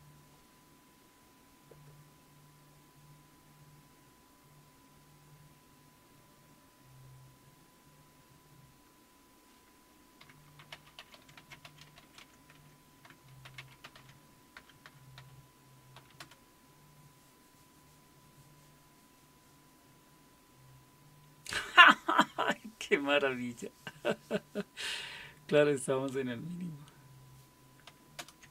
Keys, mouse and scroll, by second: 10.0-16.0 typing, 16.2 Return, 28.2 super+Return.